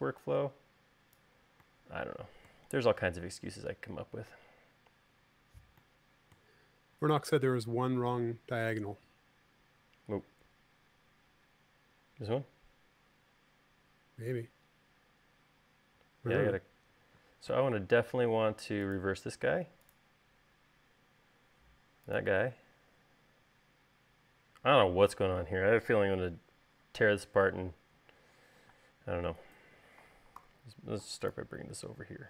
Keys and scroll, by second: 7.6 space, 29.3 space, 31.0 v.